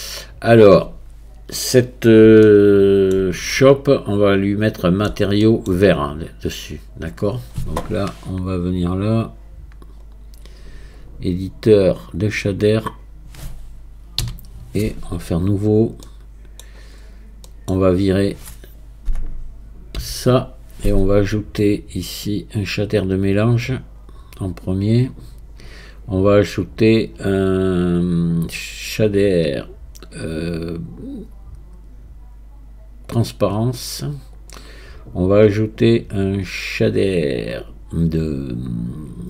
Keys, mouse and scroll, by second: 2.5-6.6 shift+middle drag, 6.6-12.7 drag, 12.7-13.6 scroll down 1, 13.6-14.2 scroll down 1, 14.2 n, 15.4 click, 16.1 middle click, 17.0-17.5 scroll up 3, 17.5 middle click, 18.3-20.0 drag, 20.0 x, 22.6-39.2 drag.